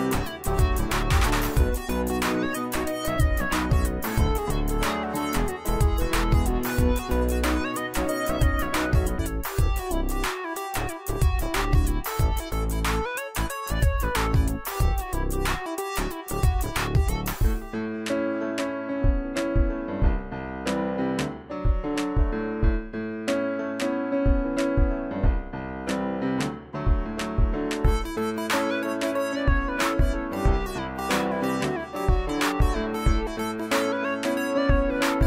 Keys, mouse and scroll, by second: 0.0-0.3 click, 7.4 space, 7.4-8.1 click, 7.9 space, 8.2-9.4 drag, 12.1-12.9 alt+drag, 13.5 ctrl+d, 15.2 click, 17.0 z, 17.4 click, 18.3 space, 18.5 click, 18.8 space, 19.4-22.0 drag, 25.8-27.0 alt+drag, 27.4 ctrl+d, 28.3 ctrl+d, 30.1 ctrl+d, 30.8 space, 30.9-31.2 click, 31.0 space, 31.4 ctrl+d, 33.9 click, 34.5 Delete, 34.9 space, 35.0 click, 35.0 space, 35.2 z.